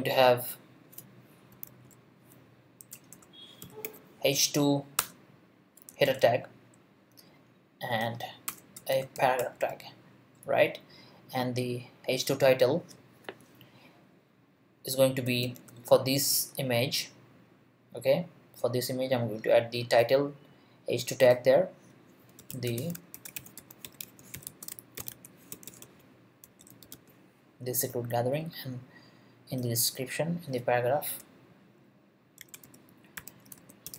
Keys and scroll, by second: 1.7 super+2, 2.9-4.3 typing, 5.0 Return, 5.9 shift+Return, 6.0 shift+., 8.5 Return, 8.7-10.0 typing, 15.4 shift+t, 22.2-27.4 typing, 32.2-33.9 typing.